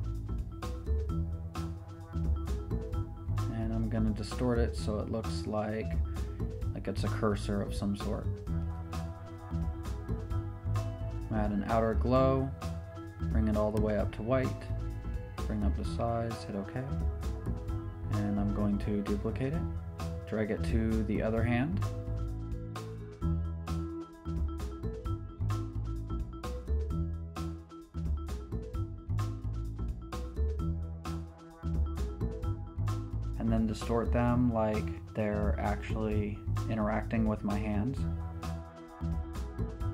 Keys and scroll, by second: 4.9 Return, 18.8 super+j, 19.1 v, 21.1 super+t, 31.0 Return, 35.6 ⟲, 35.9 super+t.